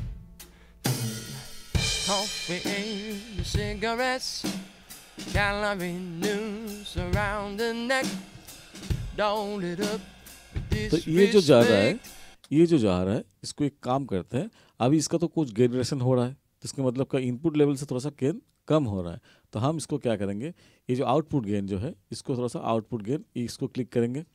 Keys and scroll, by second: 12.3 space.